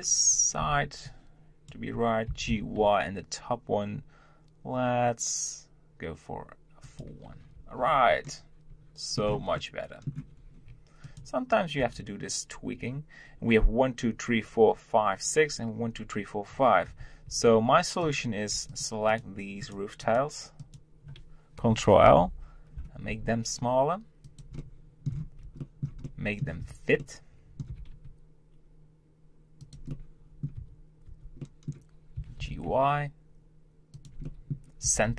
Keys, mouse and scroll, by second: 8.0 scroll down 3, 8.2 scroll up 1, 8.4-10.3 middle drag, 10.3 scroll up 2, 11.0 click, 12.3 Tab, 16.9 Tab, 17.3 Tab, 18.0 click, 18.7 shift+click, 19.1 shift+click, 19.6 shift+click, 20.0 shift+click, 22.0 ctrl+l, 23.1 s, 24.6 middle click, 25.1 Tab, 25.6-26.6 shift+middle drag, 26.6 Tab, 27.0 middle click, 27.7 g, 29.9 middle click, 30.6 Tab, 31.1 Tab, 31.4 middle click, 32.1 g, 34.2 middle click, 34.9 g.